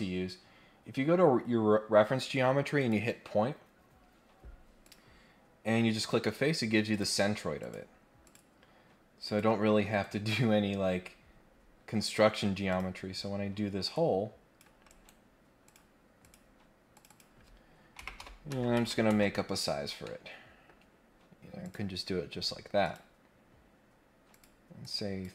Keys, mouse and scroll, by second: 2.8 click, 4.8 click, 6.9 click, 7.6 click, 8.2 click, 9.2 click, 10.5 scroll down 1, 10.8-11.6 scroll up 3, 12.7 click, 13.9 click, 14.9 right click, 15.6 click, 16.2 click, 16.9 click, 20.0 middle click, 21.6 click, 22.8 click, 24.3 click, 24.8 click.